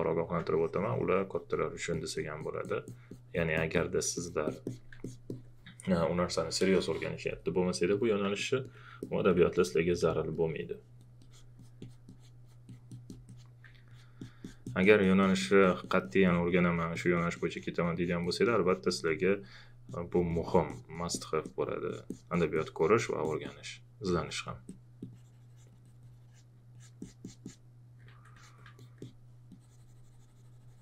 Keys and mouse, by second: 0.5 click, 8.3 alt+click, 9.9 alt+click, 13.9 alt+click.